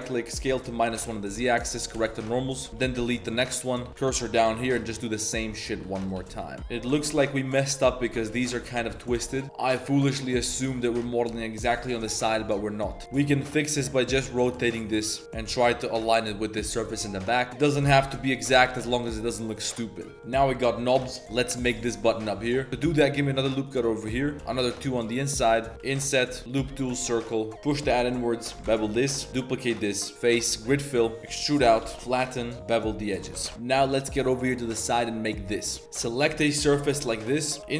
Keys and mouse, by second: 0.0-0.3 typing, 2.2-4.4 typing, 2.5 shift+click, 2.7 ctrl+KP_Add, 5.7-7.1 typing, 6.6 Tab, 8.3-8.9 typing, 10.4 click, 10.5 middle click, 10.9 z, 11.0 click, 11.9 KP_7, 12.1 z, 13.0 r, 13.2 r, 15.0 g, 15.2 r, 17.0-18.8 typing, 17.9 Tab, 18.1 drag, 18.8-19.3 drag, 19.5 drag, 20.0 click, 20.8 shift+middle click, 21.0 middle drag, 22.7 ctrl+z, 22.7 Tab, 22.7 ctrl+r, 25.5 3, 25.7 KP_Decimal, 25.9 i, 26.4 w, 27.5 shift+s, 27.5 e, 27.7 2, 27.9 alt+click, 28.1 middle click, 28.6 ctrl+b, 29.3 1, 29.3 shift+d, 30.1 click, 30.1 s, 31.2 e, 31.8 shift+s, 32.2 click, 32.5 ctrl+b, 32.5 z, 33.4 Tab.